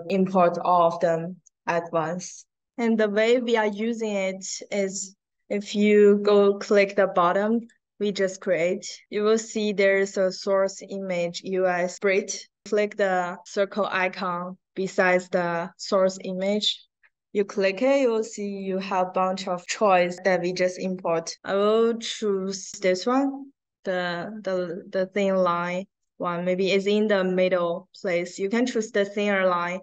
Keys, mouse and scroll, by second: 3.7 click, 4.9 click, 5.6 click, 6.2 click, 7.5 click, 8.2 click, 18.1 click, 18.8-19.2 scroll down 1, 20.1 drag, 20.7 click, 25.2 click, 26.3 middle click, 26.9 middle click.